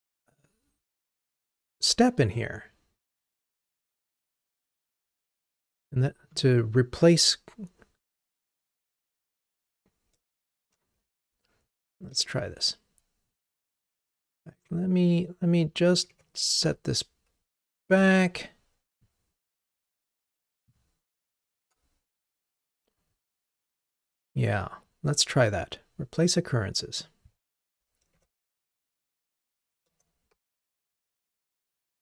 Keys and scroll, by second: 18.2 ctrl+Tab, 29.9 Return.